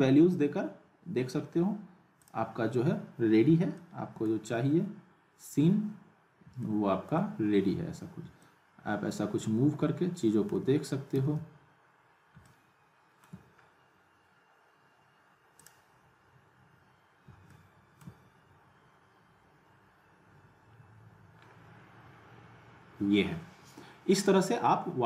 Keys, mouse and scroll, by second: 2.2 click, 3.7-4.4 alt+middle drag, 6.6-7.2 alt+middle drag, 8.4-10.6 alt+middle drag, 11.2 z, 12.4-13.3 alt+middle click, 13.6-14.2 scroll up 1, 15.6 click, 17.5-18.1 alt+middle drag, 18.9 scroll up 1.